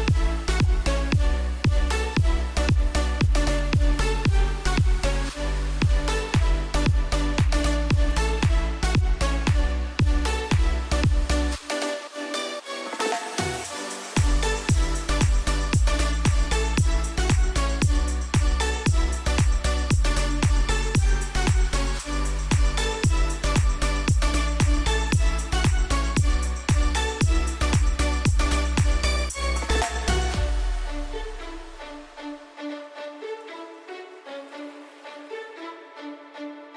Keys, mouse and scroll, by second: 2.0 shift+click, 4.0 shift+click, 17.4 click, 20.0-20.6 scroll up 1, 20.6 Return, 21.1 click, 21.7-22.1 scroll up 1, 22.1 Return, 23.8 click, 28.0 u, 28.5 click, 29.1-30.3 scroll up 1, 30.3 Return, 31.4 click, 31.9-32.7 scroll up 1, 32.7 Return, 33.8 click, 34.3 scroll down 1.